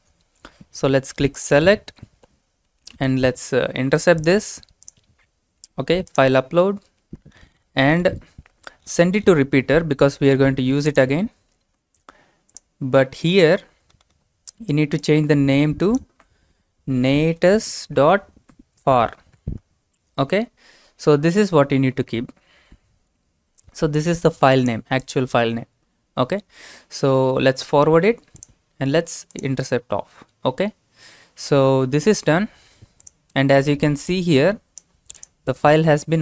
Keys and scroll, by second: 3.1 alt+Tab, 16.8-17.7 typing, 19.1-20.8 typing.